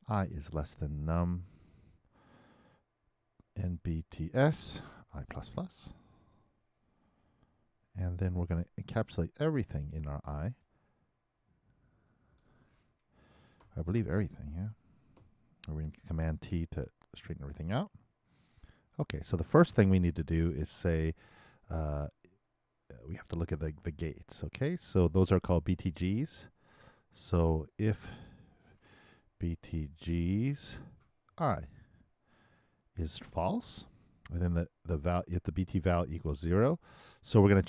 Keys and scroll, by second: 0.3-1.4 typing, 5.4 shift+i, 6.1 shift+=, 7.0 shift+0, 7.7 shift+[, 14.1 shift+Return, 15.1 shift+], 16.2 shift+super+t.